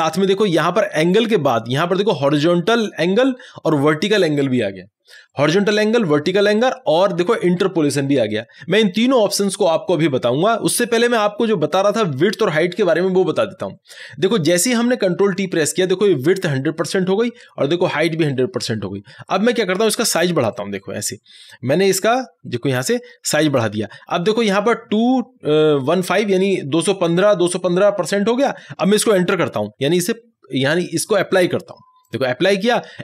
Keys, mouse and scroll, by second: 20.5 ctrl+t, 20.5-26.1 drag, 32.1 click.